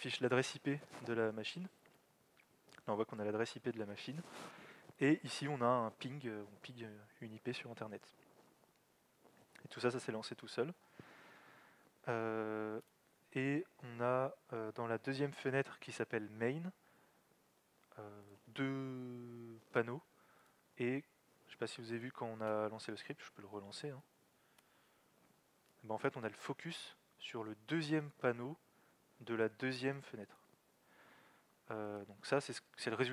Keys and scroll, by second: 1.7 alt+x, 1.9 alt+Down, 23.0 alt+x, 23.9 Up.